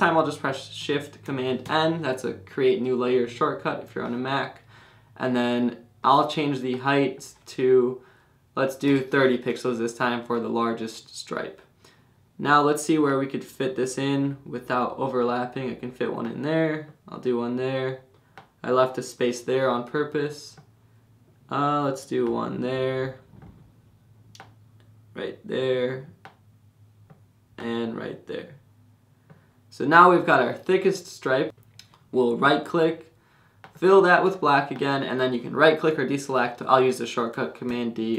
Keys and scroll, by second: 1.6 shift+super+n, 2.8 Return, 8.6-9.4 typing, 37.7 super+d.